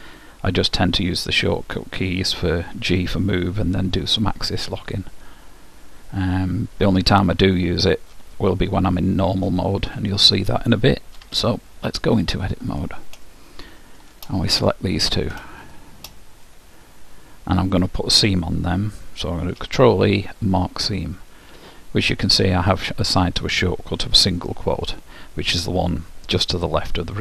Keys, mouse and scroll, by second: 5.1-7.1 drag, 11.1 Tab, 12.2-13.9 middle drag, 14.6-17.4 drag, 17.1-18.3 middle drag, 19.6 ctrl+e.